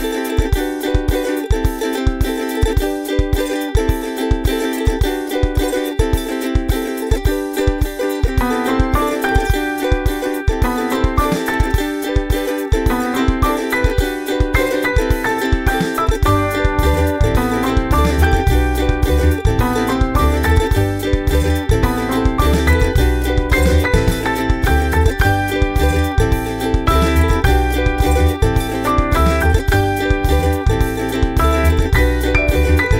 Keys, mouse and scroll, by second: 1.0-2.7 ctrl+scroll down 9, 3.3 click, 3.7-4.1 scroll down 4, 4.4 click, 4.9-5.6 scroll down 4, 5.6 click, 6.1-6.5 scroll down 4, 7.1 click, 7.4-10.6 drag, 11.5 click, 11.9-12.4 ctrl+scroll up 4, 12.7 ctrl+scroll down 2, 13.4-14.4 drag, 14.7 click, 15.0-16.8 drag, 17.0 click, 17.9-20.3 drag, 20.7-22.7 drag, 22.9 ctrl+scroll up 2, 23.4 ctrl+scroll down 2, 27.9 click, 28.1 click, 28.9 ctrl+a, 29.3-30.4 typing, 30.8 click.